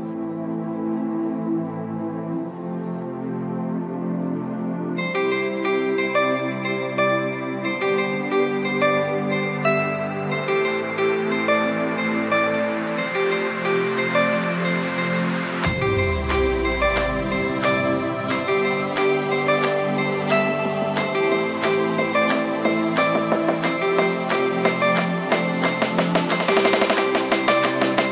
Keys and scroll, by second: 0.1 ctrl+j, 0.4 ctrl+t, 26.6 ctrl+t.